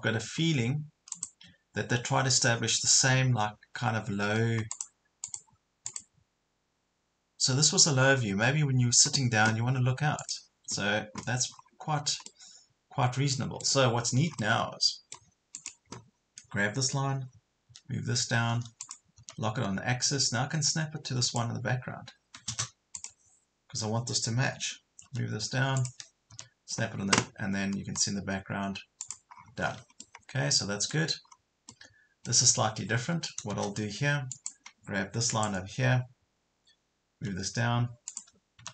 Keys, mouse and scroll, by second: 1.1 click, 11.5 scroll up 1, 12.3-13.7 middle drag, 14.1 scroll up 1, 14.4 middle click, 15.6 click, 17.7 m, 18.8 click, 21.3 click, 22.7 space, 23.0 click, 25.1 m, 25.8 click, 29.0 click, 29.3 scroll down 1, 30.0 middle click, 31.3 scroll up 1, 31.7 middle click, 32.1 scroll up 1, 32.9 Escape, 34.3 click, 37.2 m, 38.1 click.